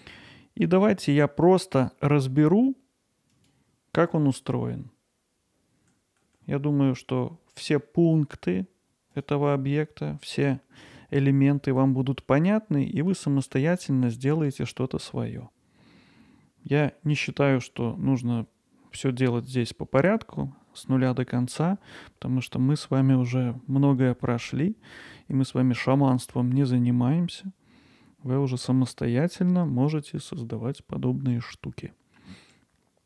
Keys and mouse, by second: 3.3-4.5 drag, 4.5-13.1 alt+middle drag, 13.5 middle click, 25.5-32.2 alt+middle drag, 32.5-33.0 alt+middle drag.